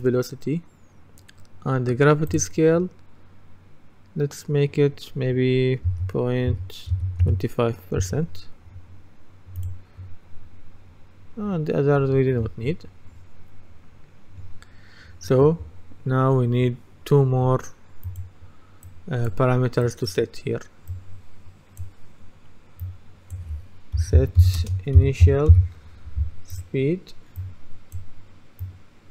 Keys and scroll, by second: 5.9 KP_0, 7.0 KP_2, 8.1 Return, 23.8-25.3 typing.